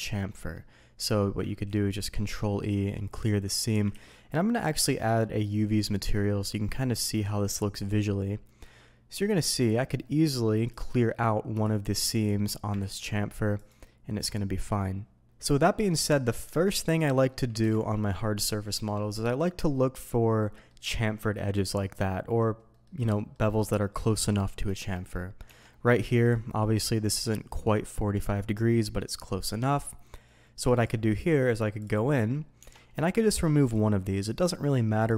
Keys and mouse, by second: 1.6 ctrl+e, 3.9 ctrl+z, 4.9 click, 5.7-7.0 drag, 7.9 click, 8.6 middle click, 10.0 middle click, 11.1 middle click, 11.5 click, 12.1 click, 12.8 ctrl+e, 14.2 middle click, 15.8 middle drag, 16.4 Tab, 17.1 middle click, 17.6 Delete, 17.9 middle click, 18.4-18.8 shift+drag, 20.4-20.7 middle drag, 22.8 middle click, 23.1 middle drag, 24.2 middle click, 24.7 shift+middle drag, 25.4 Tab, 25.7 middle click, 26.5 middle click, 27.0 middle click, 28.1 middle click, 29.2-29.8 middle drag, 30.8 click, 31.8 click, 32.2 middle click, 32.6 Tab, 32.9 shift+middle click, 34.2 click.